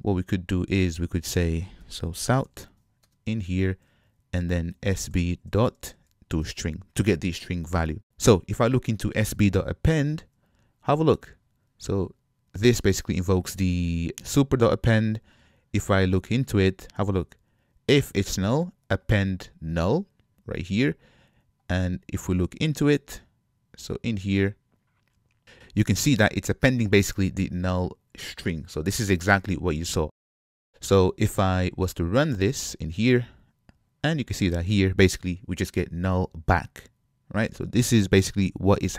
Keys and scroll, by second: 3.0 Escape, 3.1 Return, 10.0 super+b, 29.6 ctrl+Tab, 32.5 shift+F10.